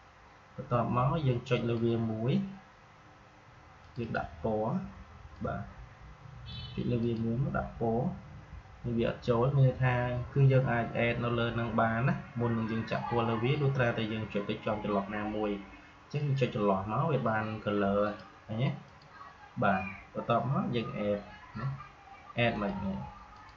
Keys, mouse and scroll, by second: 1.4-6.9 drag, 16.1 click, 22.4 click.